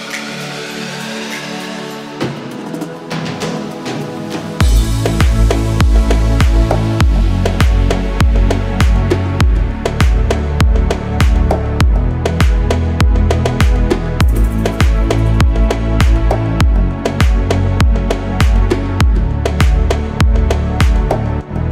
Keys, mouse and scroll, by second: 0.2-0.8 scroll up 2, 0.8-3.4 middle drag, 6.6-7.1 middle drag, 7.8-9.7 drag, 10.2 middle click, 11.0 Tab, 12.2 2, 12.4 click, 13.0 alt+click, 14.7 ctrl+b, 16.5-17.1 scroll up 1, 19.2 click, 19.8-20.4 scroll down 2, 20.4-21.4 middle drag.